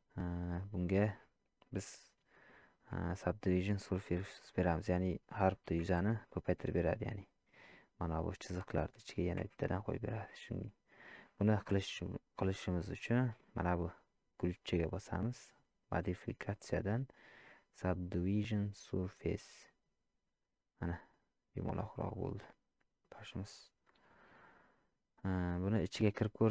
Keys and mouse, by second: 0.6 shift+middle click, 6.7 shift+middle click, 13.2 middle click, 15.9-19.9 drag, 20.8-23.0 middle drag.